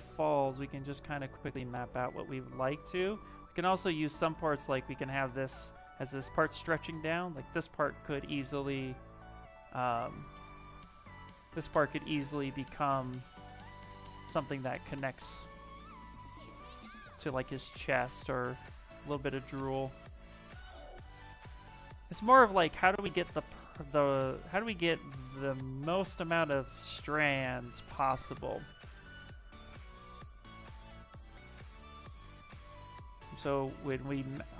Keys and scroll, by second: 21.8 ctrl+z, 24.1 ctrl+z, 29.6 ctrl+z.